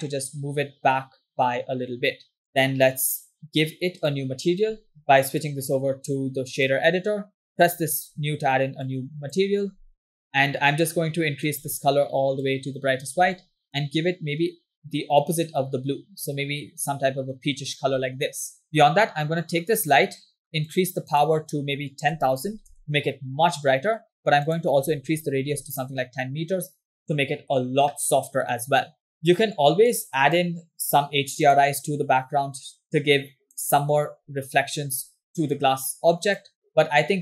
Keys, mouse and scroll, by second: 4.2 click, 5.1 ctrl+z, 5.6-6.9 drag, 7.6 click, 7.6 scroll up 2, 9.2 click, 9.8 scroll down 2, 10.2 middle click, 11.5 click, 19.8 click, 20.6-22.8 drag, 24.5-26.2 drag, 29.9 click, 31.5-34.2 drag, 36.7-37.2 drag.